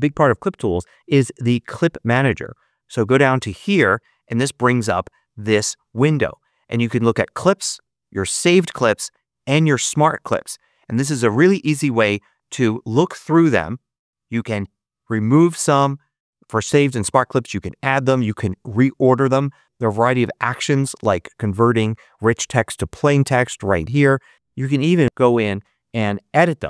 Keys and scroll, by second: 26.1 shift+1.